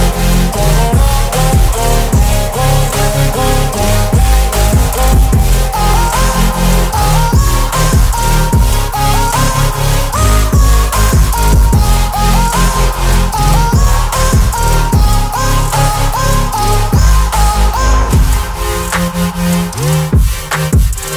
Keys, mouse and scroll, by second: 0.2 Return, 0.9-2.2 drag, 2.7 ctrl+t, 3.7-4.6 drag, 11.4-15.2 alt+drag, 19.0 ctrl+t, 20.3-21.1 drag.